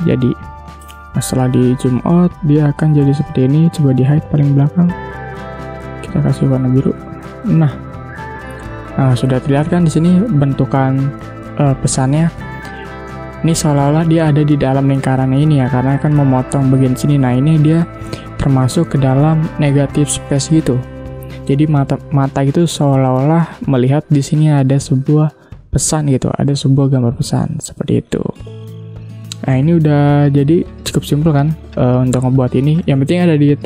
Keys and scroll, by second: 0.6 ctrl+0, 6.5 i, 7.2 v, 13.1 space, 29.9 ctrl+0.